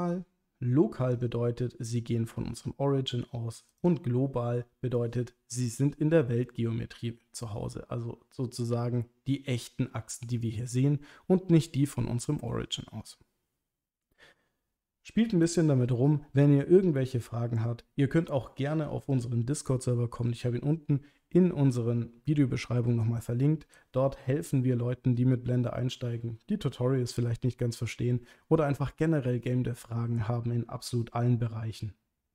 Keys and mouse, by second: 1.1 click, 3.8 click.